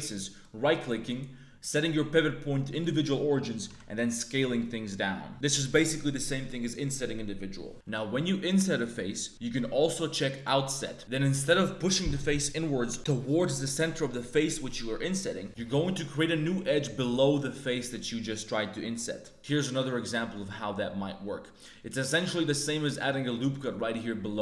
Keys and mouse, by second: 1.6-2.8 drag, 3.6 s, 7.7 x, 7.7 1, 7.7 3, 7.8 i, 10.3 click, 15.4-19.3 drag, 19.3 ctrl+z, 19.3 a, 19.3 shift+w, 19.3 i, 23.1 ctrl+r.